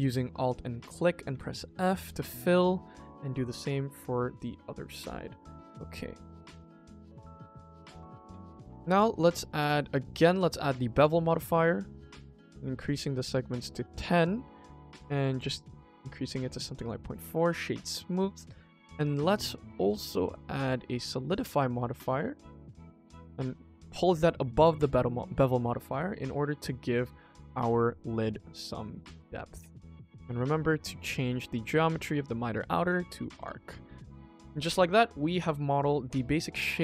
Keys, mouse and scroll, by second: 0.4 alt+click, 0.8 middle click, 1.2 f, 1.5 middle click, 2.6 alt+click, 3.2 f, 3.9 Tab, 4.3 KP_1, 5.5 g, 7.1 click, 7.4 middle drag, 7.8 click, 8.1 middle drag, 8.8 click, 9.0 click, 9.4-10.0 drag, 10.7 middle drag, 11.0-12.0 scroll up 1, 12.2-13.9 drag, 14.4 click, 14.9 click, 15.1 click, 15.2 click, 15.4 click, 16.3 middle drag, 16.7-18.0 right drag, 18.0-20.6 drag, 20.9 middle drag, 22.0 click, 22.2 click, 22.3 click, 22.5 click, 23.3-24.7 drag, 25.3-25.7 middle drag, 25.8-26.2 scroll up 2, 26.2 shift+middle drag, 26.5-27.0 middle drag, 28.4 click, 28.6 click, 28.8 click, 28.9 click, 29.1 click, 29.3 click, 30.0-30.7 scroll down 2, 30.7 click, 31.0-31.5 scroll down 2, 31.5-32.8 drag, 33.3 click, 34.2 click, 34.5 middle drag, 34.7-35.1 scroll down 2, 35.1-35.7 middle drag, 35.8 KP_1, 36.3 click, 36.6 shift+click.